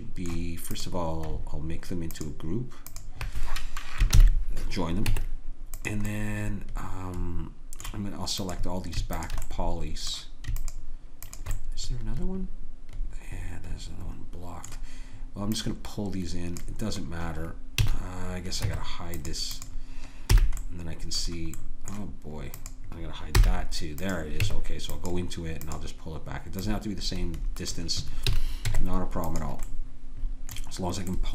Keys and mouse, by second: 4.2 ctrl+j, 5.0 Tab, 6.1 click, 7.7 click, 8.4-12.1 middle drag, 12.1-13.2 drag, 15.5-17.8 drag, 17.8 a, 18.6 Tab, 19.5-21.0 right drag, 20.3 h, 23.4 h, 24.4 Tab, 28.3 a, 28.7 Tab.